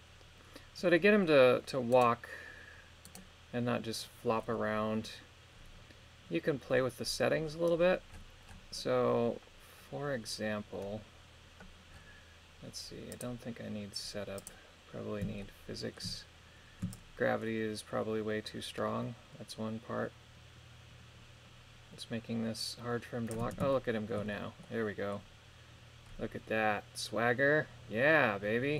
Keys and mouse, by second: 3.1 right click, 13.2 click, 14.4 click, 15.4 shift+middle click, 17.0-23.4 shift+drag, 23.8 shift+middle click, 24.7 middle click.